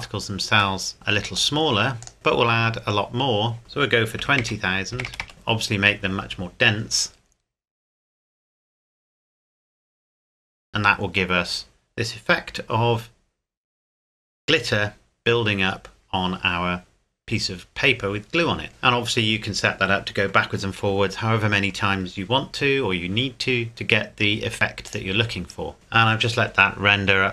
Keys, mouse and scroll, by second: 1.3 click, 2.1 scroll up 1, 3.6 click, 4.2 KP_2, 5.0 KP_0, 5.3 KP_Enter, 24.9 click.